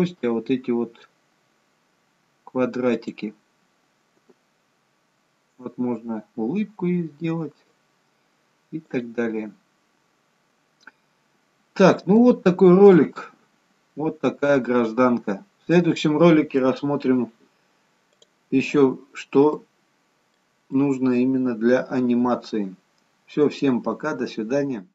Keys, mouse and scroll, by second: 0.7-1.2 scroll up 3, 1.2-1.7 scroll down 2, 3.1 click, 4.7 g, 9.5-11.0 scroll down 10, 12.1 scroll down 6, 12.3 shift+middle click, 13.3 middle click, 14.8-15.3 scroll up 2, 15.3-16.4 scroll down 1, 16.4-17.9 scroll down 1, 19.6 middle click, 21.0 middle click.